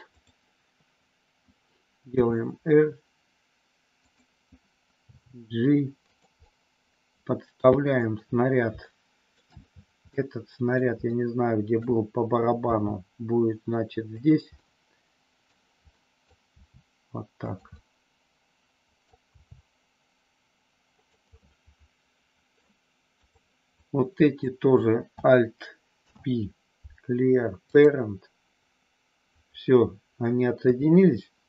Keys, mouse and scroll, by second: 0.1 click, 2.1 r, 5.1 g, 6.1 click, 6.3 scroll up 1, 6.6-8.0 middle drag, 8.9 scroll up 1, 9.0 shift+middle click, 10.1 middle click, 11.1 shift+middle click, 12.6 g, 14.1 click, 14.5 scroll up 1, 14.6 middle click, 15.9 scroll up 1, 16.0 middle click, 16.5 g, 17.5 click, 17.7 scroll up 1, 17.9-19.0 middle drag, 19.3 g, 21.0 click, 21.3-22.6 middle drag, 23.2 click, 23.7 click, 25.9 alt+p, 30.6 KP_3.